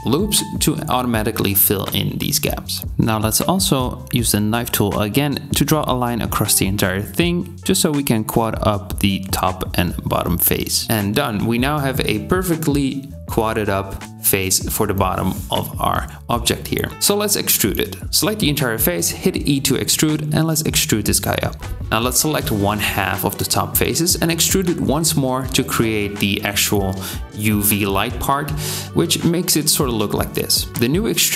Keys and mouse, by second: 3.6 k, 10.2 middle click, 16.9 a, 20.7 e, 21.9 KP_7, 21.9 c, 22.4 middle click, 22.7 3, 23.0 c, 26.8 KP_3, 27.4 e, 30.7 2.